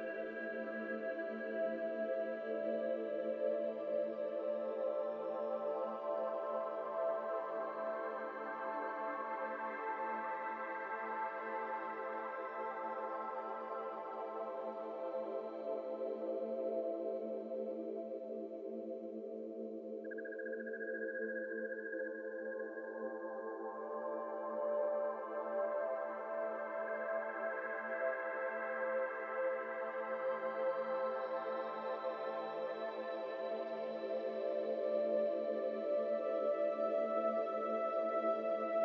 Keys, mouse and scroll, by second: 5.0-5.3 drag, 5.3-6.1 scroll down 1, 6.5-7.0 drag, 7.0-7.8 scroll down 1, 7.8-10.6 drag, 10.6-11.1 middle drag, 11.1-12.1 drag, 16.2 click, 17.1-20.6 drag, 20.6-21.4 middle drag, 21.4-23.8 drag, 23.8 scroll down 5, 24.0-24.8 middle drag, 24.8 click, 25.1 middle drag, 25.3 scroll up 2, 25.5 shift+middle drag, 25.8-26.3 drag, 26.6 Tab, 26.9-28.1 middle drag, 28.1 scroll up 3, 33.4 s, 34.0 s, 36.3 scroll up 1, 36.4 middle click, 36.7 Tab, 36.8-37.2 scroll down 4, 36.9 middle drag, 37.5 middle click, 38.3 scroll up 3.